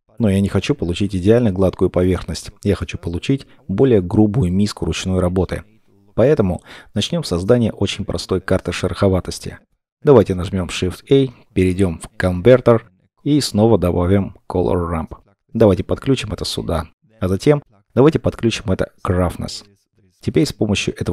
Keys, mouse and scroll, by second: 7.6 middle click, 7.9-9.1 scroll down 1, 10.1 shift+a, 16.4 middle click.